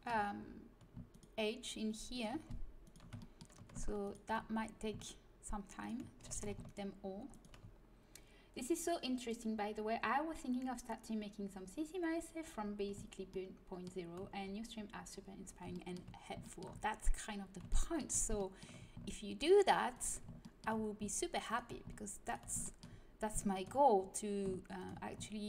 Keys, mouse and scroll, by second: 0.0 middle click, 3.3-6.3 middle drag, 6.3 ctrl+z, 13.2-18.6 middle drag, 19.9 right click, 20.4-25.4 middle drag.